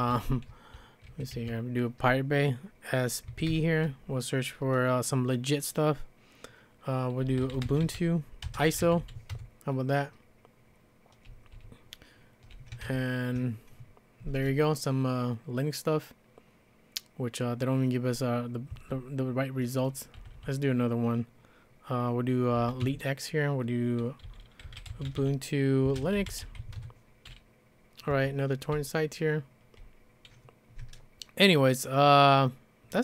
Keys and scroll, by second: 0.0-1.8 typing, 3.3-3.7 typing, 7.0-9.5 typing, 11.5-13.3 typing, 18.7 space, 20.2 g, 20.4 g, 22.3-29.9 typing.